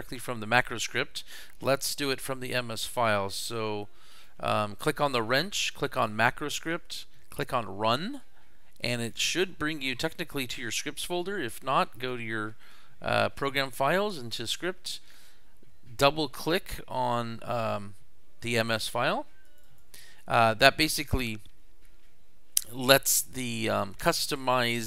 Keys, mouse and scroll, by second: 2.8 click, 4.1 click, 6.0 click, 7.4 click, 8.8 click, 12.0 click, 14.1 click, 19.4 click, 19.6 click, 24.5 click.